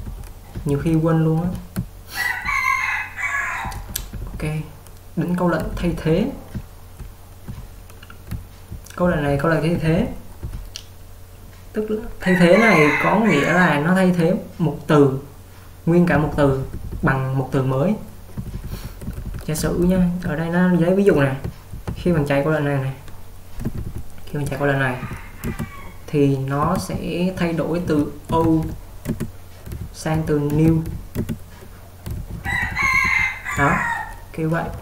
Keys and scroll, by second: 0.0-4.5 typing, 5.6-11.0 typing, 16.4-16.8 typing, 18.2-19.6 typing.